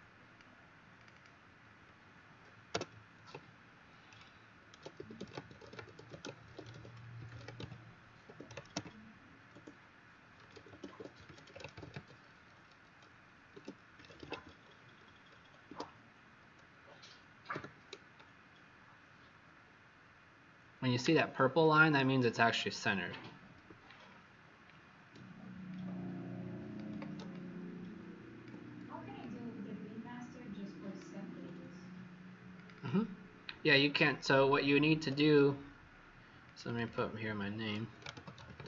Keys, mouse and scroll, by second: 1.1 click, 2.6 BackSpace, 4.4-8.2 typing, 10.1-12.5 typing, 13.7-14.8 typing, 15.6 Escape, 17.5 w, 18.1 shift+click, 22.4 click, 24.0 alt+scroll down 1, 25.7 alt+click, 27.2 click, 29.1 click, 32.7 click, 34.8 Escape, 36.4 click, 36.6 click, 36.8 click, 37.8-38.6 typing.